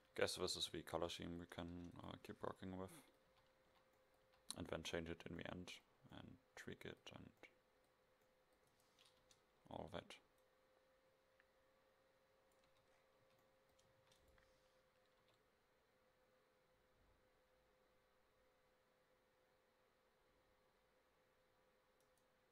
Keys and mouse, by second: 0.0 Escape, 0.7 a, 0.9 a, 1.1 a, 1.8 ctrl+s, 3.5 KP_5, 3.7 KP_5, 4.3 KP_5, 8.8 middle click, 9.3 Tab, 12.7 Tab, 13.3 a, 14.1 ctrl+s, 15.3 KP_0, 22.1 right click.